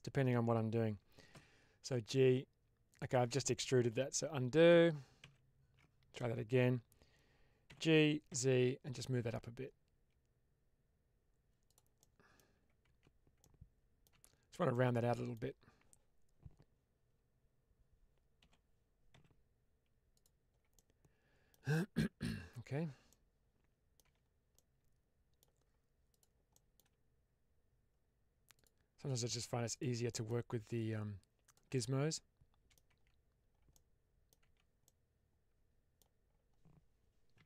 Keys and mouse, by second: 1.2 g, 2.8 click, 4.1 ctrl+z, 4.6 ctrl+z, 5.1 ctrl+z, 7.6 g, 8.2 z, 11.5 click, 11.9 middle click, 12.7 Tab, 13.3-13.9 middle drag, 14.0 Tab, 14.6 middle click, 18.3 g, 19.0 z, 20.0 click, 20.7 middle click, 21.9 middle click, 22.5 Tab, 23.0-23.8 middle drag, 23.9 Tab, 24.5 middle click, 26.0 click, 26.5 middle click, 28.4 shift+click, 30.0 middle click, 30.8 click, 31.7 middle click, 32.8 Tab, 33.6 middle click, 34.3 Tab, 34.8-35.9 middle drag, 37.3 1.